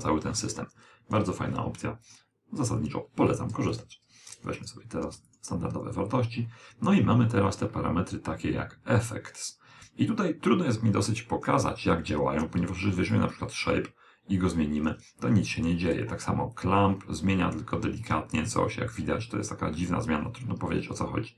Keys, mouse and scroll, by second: 1.9 click, 10.5 click, 13.9 click.